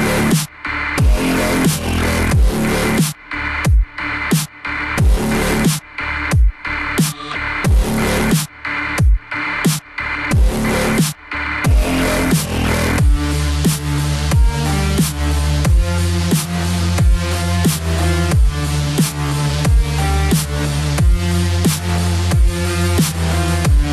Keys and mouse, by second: 0.8 click, 2.8 click, 4.2 click, 6.2 Return, 6.2 KP_Enter, 8.1 Tab, 8.7 middle click, 11.5 middle click.